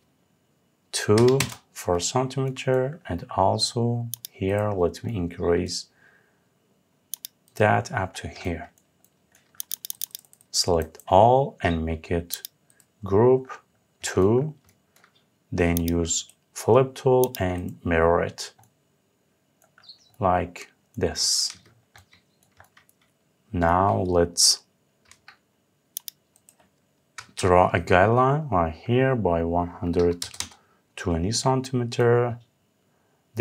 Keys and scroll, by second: 1.0 Return, 26.8 Up, 30.0 Return.